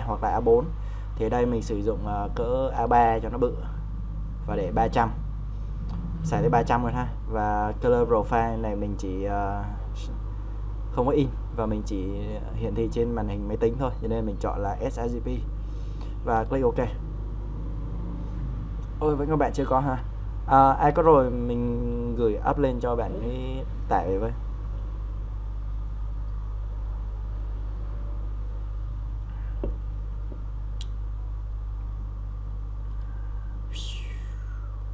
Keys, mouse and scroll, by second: 11.9-34.9 drag.